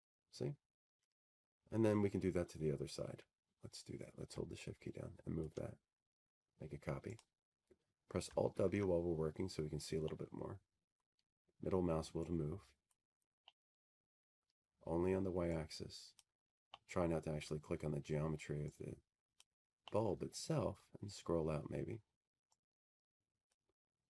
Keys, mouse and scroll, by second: 1.2 click, 3.1-3.9 typing, 4.2 Tab, 4.7-6.2 scroll, 9.9 scroll, 11.2 shift+click, 12.9 click, 14.1 alt+w, 14.8-16.0 scroll, 16.7-17.3 scroll, 19.1-20.2 drag, 20.2-21.8 middle drag, 21.8-23.1 drag, 23.1-24.0 middle drag.